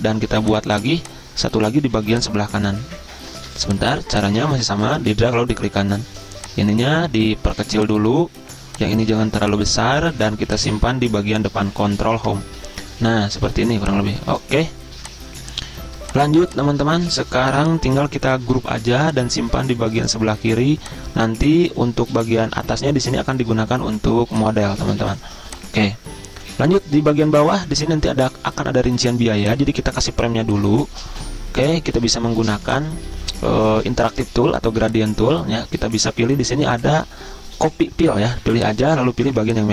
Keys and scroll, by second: 3.4 ctrl+z, 12.2 ctrl+Home, 18.5 ctrl+g.